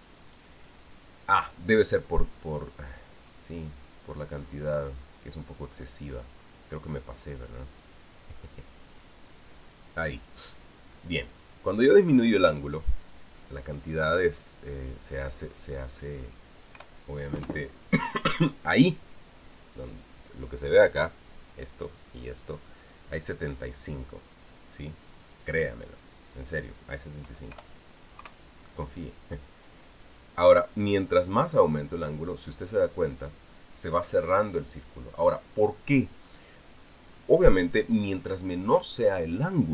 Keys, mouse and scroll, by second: 0.3 click, 3.7-7.1 scroll down 3, 7.1-8.4 scroll down 1, 9.7 click, 16.2 click, 17.5 BackSpace, 18.3 KP_2, 23.9 click, 26.9 click, 28.3 BackSpace, 29.0 KP_3, 31.4 click.